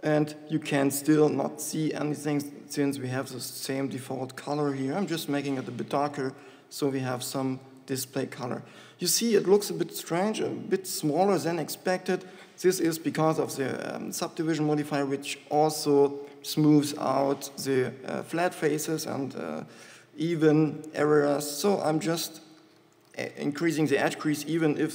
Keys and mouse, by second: 11.8 shift+Tab, 12.9 shift+Tab, 23.3 shift+e.